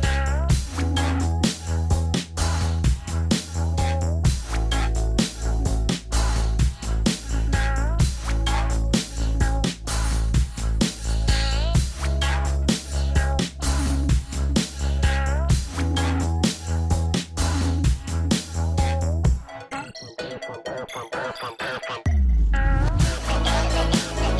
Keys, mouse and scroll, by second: 0.5 scroll down 1, 1.6 middle click, 10.4 middle click, 10.5-11.1 scroll down 1, 12.4 scroll down 1, 12.5 scroll up 1.